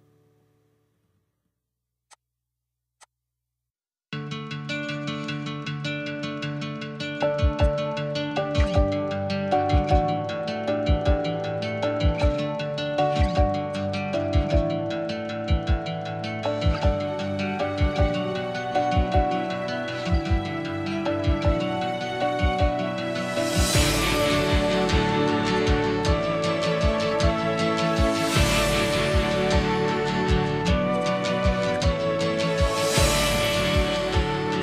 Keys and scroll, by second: 2.8 m, 5.6 m, 8.7 s, 9.9 Escape, 11.9 q, 21.7-22.5 typing, 23.7 m, 31.3 p.